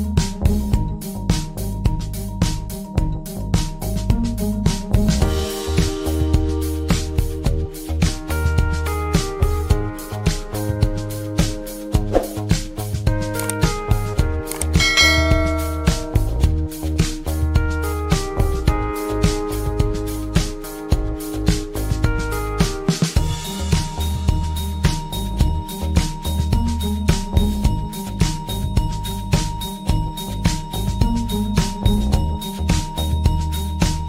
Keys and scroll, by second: 13.7 ctrl+z, 16.1 ctrl+shift+z.